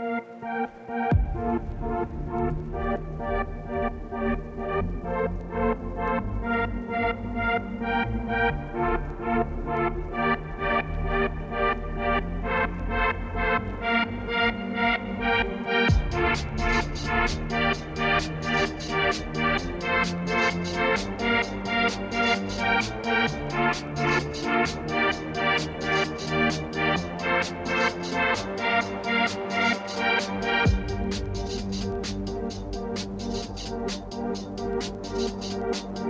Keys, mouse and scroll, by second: 2.3 shift+click, 2.8 g, 3.6 click, 3.7 g, 4.7 click, 5.1 click, 5.4 r, 7.3-8.3 middle drag, 8.3 g, 8.9 middle click, 9.3 scroll down 1, 9.4-12.1 shift+middle drag, 12.1-12.5 scroll up 3, 12.5-14.0 shift+middle drag, 17.0 shift+click, 17.6 ctrl+p, 18.2 click, 19.0 shift+click, 20.2 ctrl+p, 21.1 click, 21.3 click, 21.7 middle click, 22.5 g, 23.6 click, 23.8 click, 24.4 g, 25.7 middle click, 26.5 click, 26.6 middle click, 26.8 g, 28.9 middle click, 29.3-29.9 scroll down 1, 29.9 click, 30.0 g, 32.4 click, 32.5-33.6 middle drag, 33.6 g, 34.7 middle click, 34.9 click, 35.4 click.